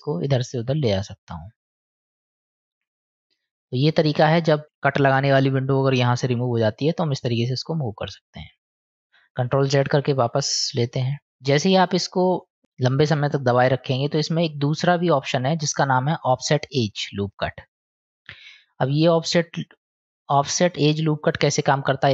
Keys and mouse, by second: 0.6-4.6 drag, 7.8 middle click, 8.9 ctrl+s, 9.8 ctrl+z, 11.0 ctrl+z, 13.4 click, 15.1-17.6 drag, 19.8-22.1 drag.